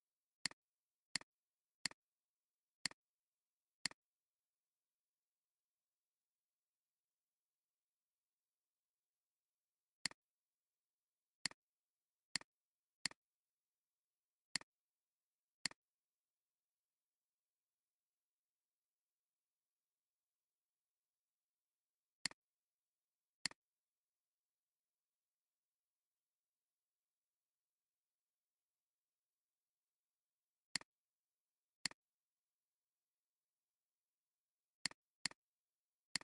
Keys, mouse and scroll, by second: 2.3 alt+scroll down 1, 2.7 space, 3.7 space, 9.5 alt+scroll up 1, 9.9 space, 10.7 alt+scroll up 1, 11.3 space, 11.9 alt+scroll down 1, 12.2 space, 14.4 space, 22.2 right click, 29.9 alt+scroll up 1, 30.5 space, 31.2 alt+scroll up 1, 32.0 alt+shift+click, 35.2 double click, 35.6 alt+scroll up 1.